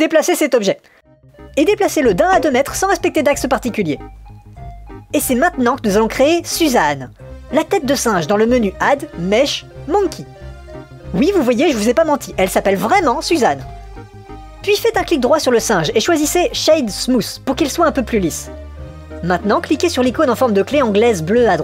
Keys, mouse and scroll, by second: 8.0 click, 8.3-10.3 drag, 15.8 right click, 18.1-18.9 middle drag, 21.0 click.